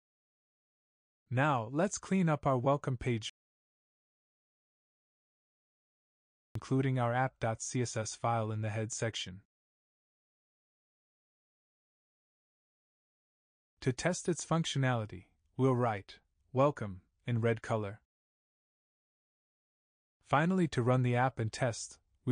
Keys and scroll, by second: 8.2 ctrl+v, 14.5 ctrl+Left, 17.7 ctrl+s, 20.0 ctrl+s, 22.1 ctrl+`.